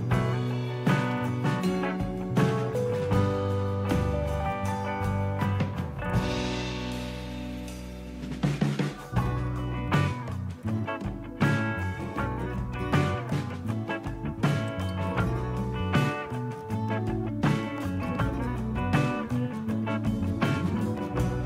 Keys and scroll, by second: 0.0-1.2 typing, 9.0-10.0 typing.